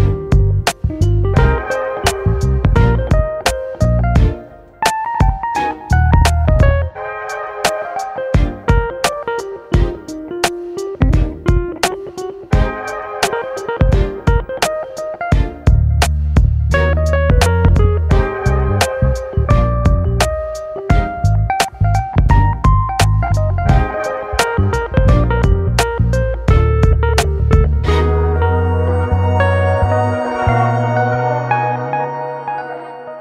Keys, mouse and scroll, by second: 0.7 ctrl+i, 1.3 alt+z, 1.5 scroll up 2, 1.8 shift+middle click, 2.3 alt+z, 2.9 g, 4.1 scroll down 2, 4.3-6.4 middle drag, 6.4 click, 7.1-8.8 middle drag, 8.8 KP_7, 9.3 alt+z, 10.0 alt+z, 10.5 shift+middle click, 11.2 alt+z, 11.9 click, 12.1 alt+z, 12.6 scroll up 1, 12.8-14.4 shift+middle drag, 14.4 alt+z, 15.1 g, 16.6 r, 17.6 ctrl+r, 20.6 alt+z, 21.1 g, 23.4 alt+z, 23.8 ctrl+click, 24.1 alt+z, 24.6 g, 26.2 click, 26.4 Tab, 26.7-27.8 scroll down 6, 26.9 click, 27.8 shift+middle click, 28.3-29.0 scroll up 3, 29.0 click, 30.9-33.2 drag.